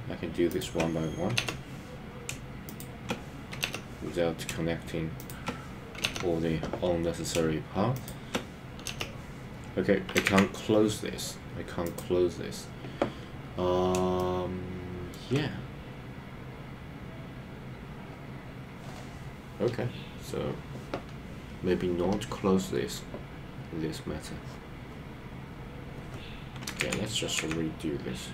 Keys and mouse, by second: 1.5 f, 3.8 f, 5.1 shift+click, 6.0 f, 8.9 f, 10.3 super+z, 14.1-15.3 shift+middle drag, 26.9 super+z, 27.4 super+z.